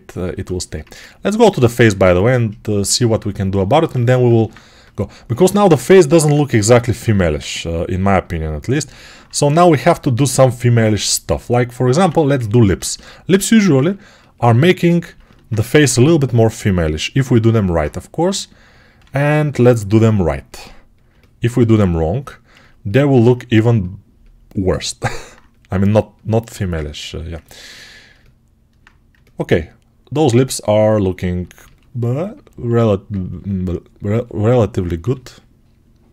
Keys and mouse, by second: 3.8 alt+q, 6.6 g, 10.7-25.0 right drag, 11.9 1, 15.6 g, 26.3 1, 27.9-31.1 alt+right drag, 31.1 ctrl+alt+click, 31.9 right click, 32.1-36.1 ctrl+alt+drag, 34.9 g.